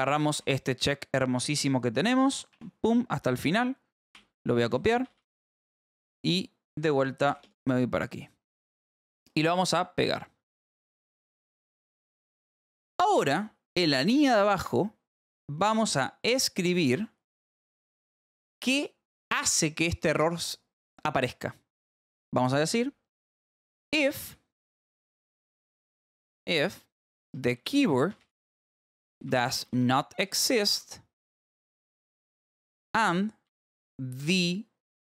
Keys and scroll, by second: 0.0-0.8 typing, 2.9-5.5 typing, 6.6 f, 7.4 space, 7.9 a, 10.1 alt+v, 10.5 Escape, 11.5 p, 13.8 j, 14.3 a, 14.6 BackSpace, 16.9 Escape, 17.4 j, 18.1 a, 18.9 Return, 19.2 Up, 20.1 space, 24.2 a, 24.7 BackSpace, 25.1 f, 25.3 space, 26.8-35.0 typing.